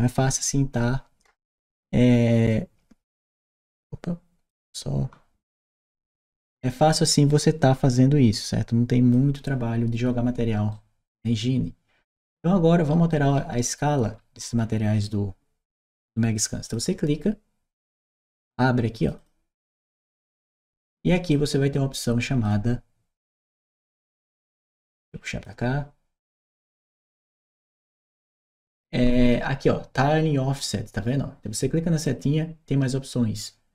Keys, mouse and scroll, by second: 2.3-4.3 drag, 8.2 click, 10.5-14.9 right drag, 12.8 w, 14.9 d, 16.5 click, 18.9 click, 19.0 click, 21.1-22.3 drag, 24.0-25.2 drag, 26.5 click, 27.2 click, 28.8-29.2 drag, 31.9 click.